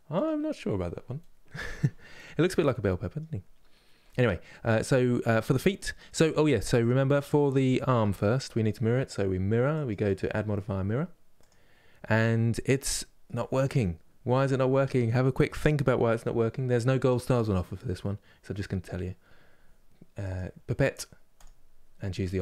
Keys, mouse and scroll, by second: 2.3 middle click, 3.2-3.7 scroll up 1, 3.7-6.5 middle drag, 6.5 click, 7.4-9.7 shift+middle drag, 11.1-12.2 drag, 12.2 scroll up 2, 12.7-20.4 shift+middle drag, 20.4 click, 21.9-22.4 middle drag.